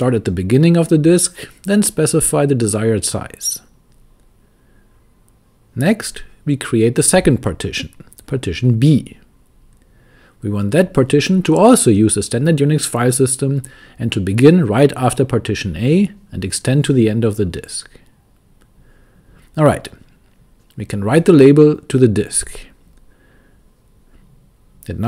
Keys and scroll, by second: 0.0-1.3 typing, 2.3 Return, 5.4 b, 7.5 Return, 8.4-10.8 typing, 11.9 typing, 13.4 Return, 14.4 shift+4, 16.8 Return, 21.8 shift+w, 22.3 Return, 23.6 y, 23.9 Return.